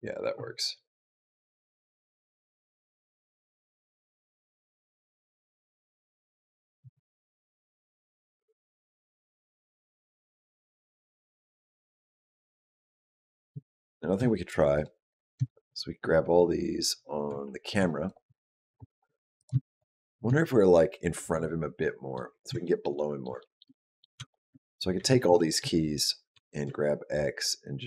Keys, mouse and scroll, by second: 6.6 space, 8.8 click, 12.7 click, 13.4 shift+middle click, 14.6 shift+click, 14.9 shift+click, 15.8-16.3 scroll down 2, 17.9 click, 19.2 click, 19.5 shift+click, 19.8 shift+click, 21.6 middle click, 22.1 scroll down 2, 22.4 shift+middle click, 22.8 middle click, 23.2 shift+middle click, 23.5 middle click, 24.1 shift+middle click, 24.1 shift+scroll down 1, 24.8 a, 25.2 shift+middle click, 26.2 g.